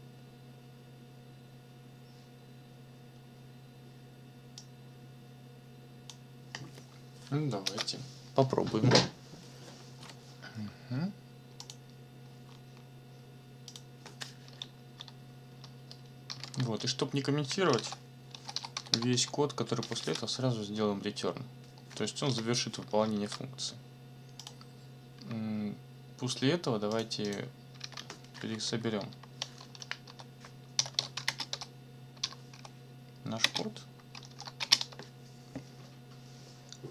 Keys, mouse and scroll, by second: 4.6-6.2 drag, 7.6 ctrl+c, 11.6 click, 12.4-12.9 scroll up 1, 13.7 click, 15.9 Return, 16.4 ctrl+v, 16.8 ctrl+Return, 17.5-19.7 typing, 20.0 ctrl+s, 22.2 Return, 23.1 ctrl+s, 24.4 click, 26.9 click, 27.2 click, 27.8 ctrl+c, 28.7 Up, 30.1-34.6 typing, 34.8 shift+Return.